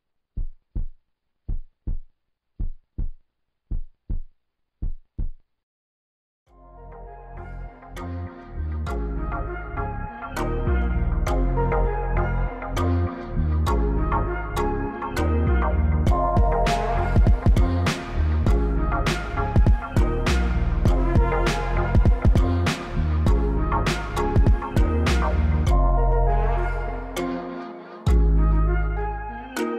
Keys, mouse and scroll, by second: 2.5-2.9 middle drag, 3.3 middle drag, 3.7 middle drag, 4.2 middle click, 4.9-5.2 middle drag, 5.3 shift+middle drag, 5.6-6.4 middle drag, 6.4 Insert, 7.3 Delete, 8.1 drag, 11.8 click, 12.9-13.6 drag, 14.6-16.4 drag, 15.8 KP_0, 17.8 click, 19.8 shift+a, 21.5 s, 22.8 click, 23.7 drag, 24.5 click, 25.1 g, 26.7 shift+middle drag, 26.8 shift+click, 26.9 shift+middle click, 28.0 click, 28.4-29.7 drag.